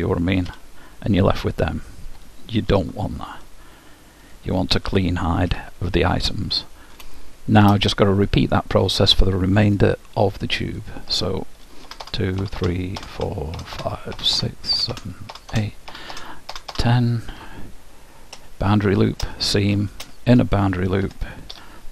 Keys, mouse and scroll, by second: 0.5 h, 2.8 ctrl+z, 4.3-6.0 drag, 5.5 h, 6.0-9.7 middle drag, 9.9-12.5 drag, 11.9 ctrl+KP_Add, 18.4 shift+', 21.0 ctrl+Tab.